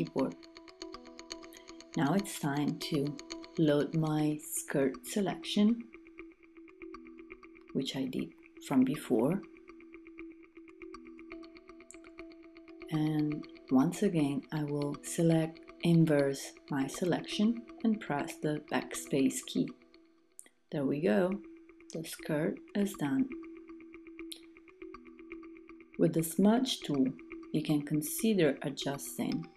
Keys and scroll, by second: 21.9 super+d.